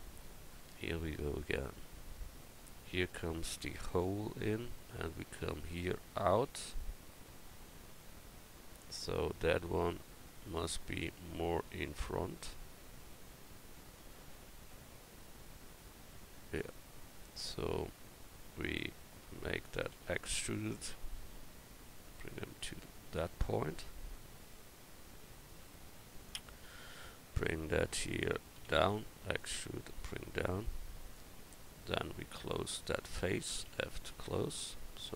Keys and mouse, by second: 9.4 Tab, 19.9 e, 23.5-24.6 middle drag, 24.7 middle click, 25.5-27.0 drag, 26.6 right click, 27.0 middle click, 28.6 e, 33.7 f, 34.1 Tab.